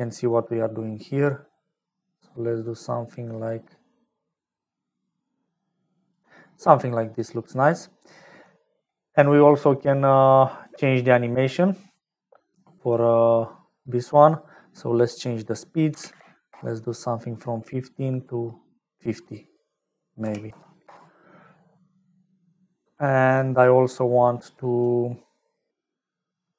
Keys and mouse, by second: 0.3-6.1 shift+drag, 7.5 middle click, 8.2 middle click, 15.2-17.0 drag, 19.5-21.5 drag, 23.1 middle click, 24.2 click.